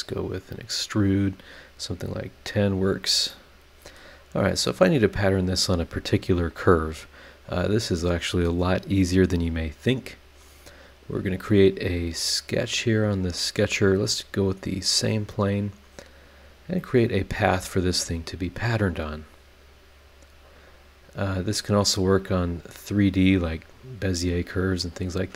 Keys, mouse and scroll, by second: 0.1 click, 2.8 click, 3.3 middle click, 12.5 click, 13.6 click, 15.1 click, 16.4 click, 19.6 click, 22.2 click, 22.7-23.3 scroll down 2, 24.3 click.